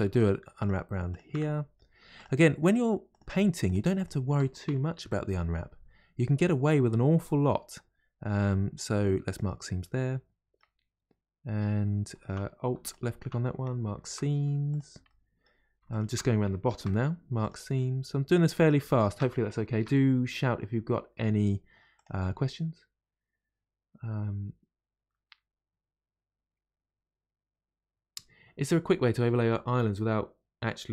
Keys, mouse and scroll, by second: 0.1 shift+click, 0.6 shift+click, 1.1 shift+click, 1.4 middle click, 2.2 shift+click, 2.6 shift+click, 3.1 shift+click, 3.6 shift+click, 4.0 shift+click, 4.9 ctrl+e, 9.8-12.8 middle drag, 12.8 alt+click, 14.0 ctrl+e, 14.8 ctrl+e, 15.0 middle click, 15.9 alt+shift+click, 16.7 ctrl+e, 17.5 ctrl+e, 17.8-19.0 middle drag, 19.0 alt+shift+click, 19.7 ctrl+e, 22.0 ctrl+e.